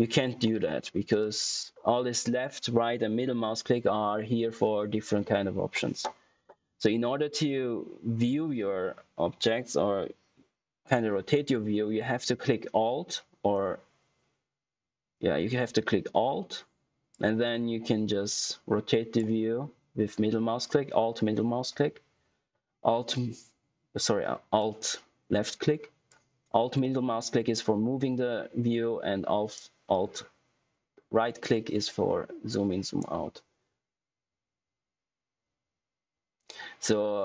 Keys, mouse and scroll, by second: 15.1 alt+Num_Lock, 17.0 alt+click, 23.0 alt+middle click, 24.5-26.1 alt+drag, 26.7-28.9 alt+middle drag, 29.5 alt+right click.